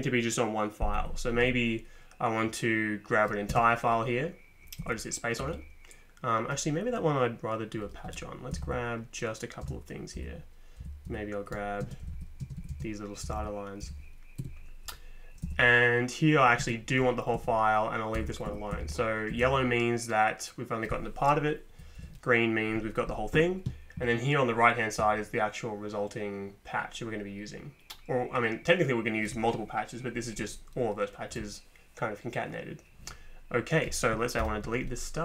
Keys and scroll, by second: 0.9 Up, 3.5 space, 4.8 Down, 5.4 Up, 8.1 Return, 8.5 Down, 8.6 Down, 9.6 space, 10.2 Down, 10.8 Down, 11.1 Up, 11.8 space, 12.0 Up, 12.1 Up, 12.4 space, 12.6 Up, 12.7 space, 13.2 Down, 13.4 Down, 13.8 Down, 14.4 ↻, 15.4 Down, 16.6 space, 17.3 Down, 18.2 Up, 18.5 Up, 18.7 Down, 18.8 Down, 19.3 Up, 19.4 Up, 22.0 Down, 34.4 ctrl+p.